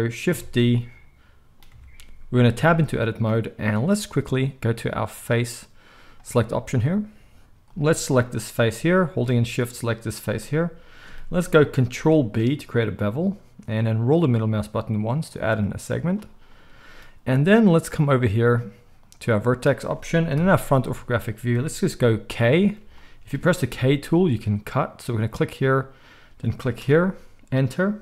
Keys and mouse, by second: 0.3 Tab, 1.7 Tab, 2.5 Tab, 5.0-7.7 drag, 7.7-9.5 middle drag, 9.5 shift+click, 9.7-18.9 shift+middle drag, 11.9 ctrl+b, 18.9-28.0 drag, 20.3 KP_1, 23.7 k.